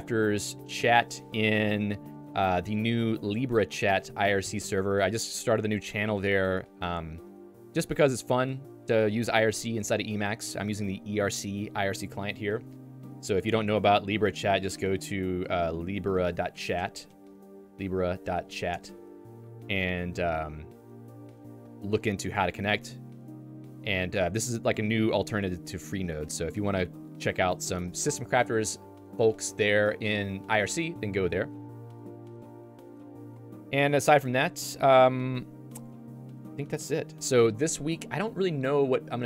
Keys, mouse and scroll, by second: 27.9 Escape.